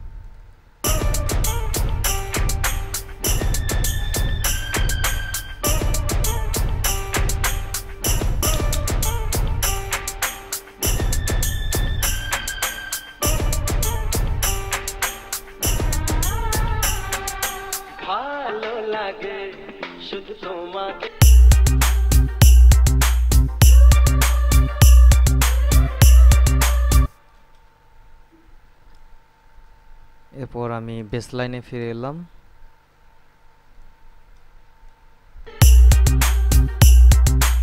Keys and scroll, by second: 1.0 space, 8.4 space, 27.3 space, 35.6 space.